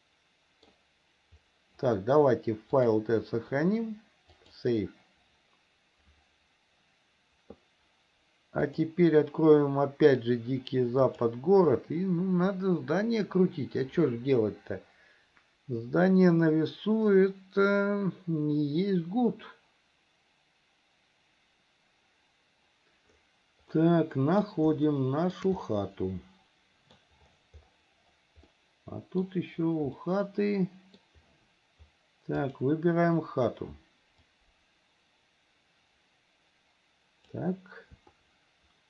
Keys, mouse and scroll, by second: 2.9-5.8 drag, 8.8-22.0 drag, 23.9 middle click, 25.0 shift+middle click, 25.8-27.1 middle drag, 28.7 middle click, 30.1-31.2 middle drag, 32.6 click, 34.4 click, 34.9-37.6 drag, 38.3-38.8 shift+middle drag.